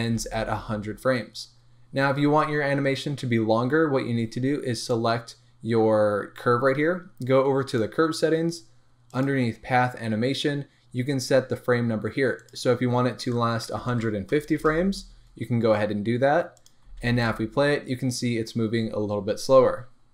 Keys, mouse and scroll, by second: 0.1 space, 1.7-3.6 scroll up 1, 7.7 click, 9.1 click, 9.7-12.4 scroll down 1, 12.4-20.1 drag, 14.6 Return, 16.9 space.